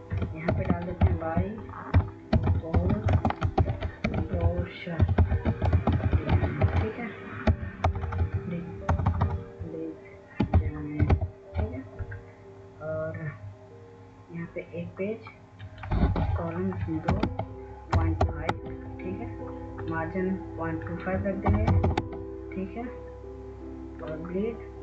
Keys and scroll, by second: 0.3-5.9 typing, 7.7-11.4 typing, 17.0-18.9 typing, 21.1-22.3 typing.